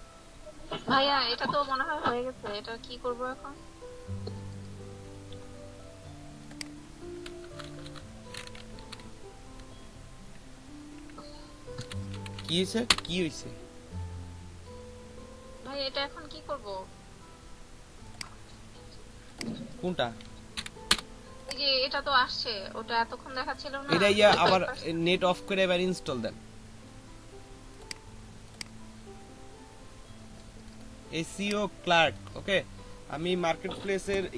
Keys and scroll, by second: 7.3 BackSpace, 7.5 BackSpace, 7.6 BackSpace, 8.8 l, 9.5 a, 11.8 c, 12.2 r, 12.4 k, 12.9 Return, 20.6 o, 20.8 Return.